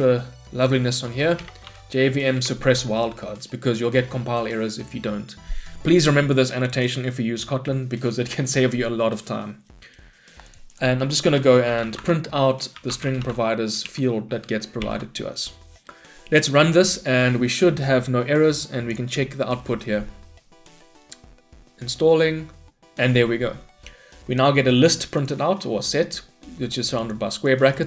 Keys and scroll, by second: 2.5 Return, 12.0 Tab, 13.9 Return, 14.8 shift+F10.